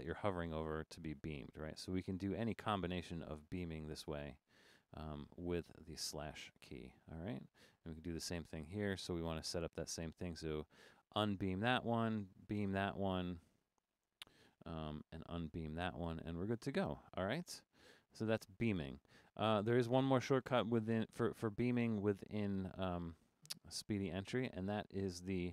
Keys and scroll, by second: 0.7-6.5 typing, 1.7 Left, 2.2 Left, 2.8 Right, 3.1 Left, 3.7 Right, 4.2 Right, 4.5 Right, 5.1 Left, 5.6 Right, 6.3 Left, 7.6 Return, 8.3 Right, 9.3 Right, 9.6 Right, 11.2 /, 11.9 Right, 12.5 /, 13.7 Right, 15.1 Right, 15.4 /, 20.4 Left, 20.6 Left, 21.2 Left, 23.1 Left, 23.9 Left.